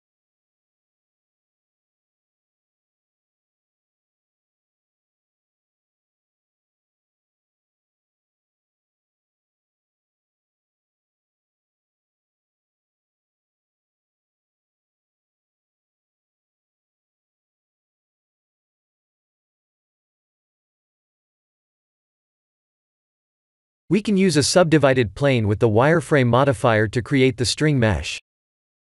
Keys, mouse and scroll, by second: 3.5 Tab, 4.6 click, 5.1 Tab, 5.5 scroll up 1, 6.5-7.2 scroll up 2, 7.2 click, 8.2 shift+click, 9.7 click, 11.6 shift+middle click, 12.0 shift+middle click, 13.5 v, 13.9 shift+l, 15.1 click, 17.3 click, 18.4 Tab, 18.9 Tab, 20.8 click, 22.7-23.8 scroll down 6, 23.9-24.4 scroll down 4, 24.8 shift+middle click, 25.4 click, 26.1 shift+a, 28.4 g.